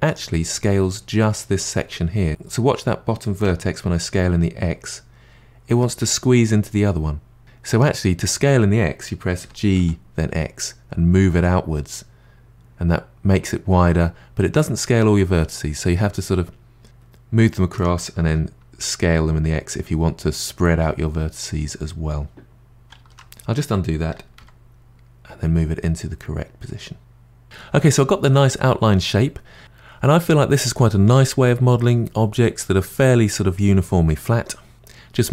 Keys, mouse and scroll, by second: 2.3 s, 9.4 g, 18.2 s, 23.0 ctrl+z, 24.1 g.